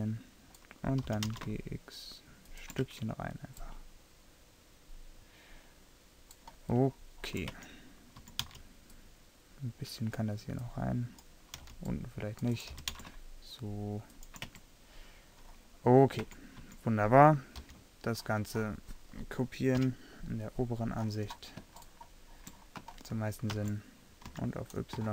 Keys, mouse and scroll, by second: 0.2 middle click, 1.1 g, 3.0 Tab, 6.9-7.6 middle drag, 7.6 Tab, 8.3 a, 8.5 c, 12.8 g, 14.6 Tab, 16.3 Tab, 16.7 a, 17.7 l, 19.9 KP_7, 23.7 shift+d.